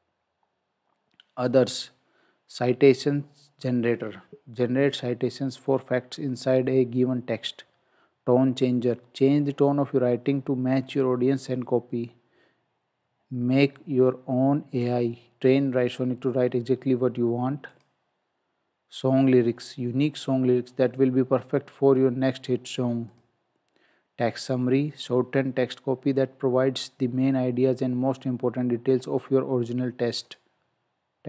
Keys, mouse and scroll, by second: 17.7 click, 30.3 click.